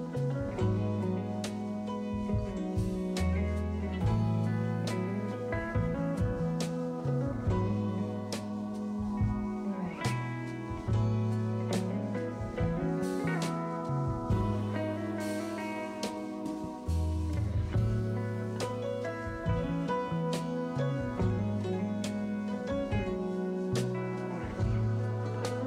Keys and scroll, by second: 5.1 s, 14.5 s, 16.0 s, 16.9 s, 18.6 2, 22.9-24.2 typing.